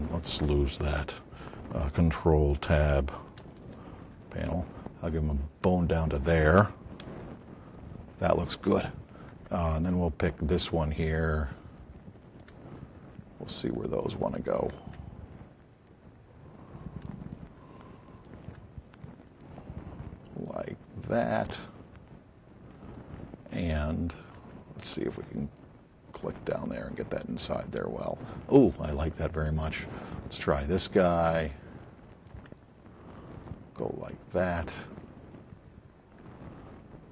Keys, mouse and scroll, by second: 3.9 Tab, 5.3 click, 6.4 click, 7.2 alt+click, 10.4 click, 11.7 click, 12.7 alt+click, 15.8 click, 19.3-21.3 drag, 23.4 alt+click, 25.5 click, 26.5-27.6 alt+drag, 29.1 alt+click, 30.7 click, 31.5-32.2 alt+drag, 33.4 alt+click.